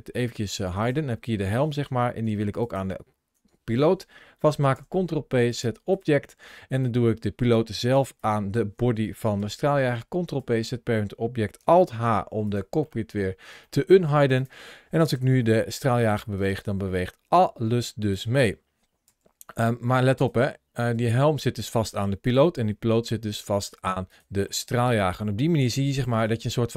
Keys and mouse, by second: 2.5 shift+click, 4.6 ctrl+p, 6.6 click, 9.2 ctrl+p, 11.7 alt+h, 12.3 click, 12.7 middle click, 13.5 middle click, 14.2 click, 15.0 g, 16.2 click, 18.9 g, 19.4 click, 20.8 g, 21.5 click, 22.1 click, 22.4 g, 23.9 click, 24.3 middle click, 25.9 ctrl+shift+a.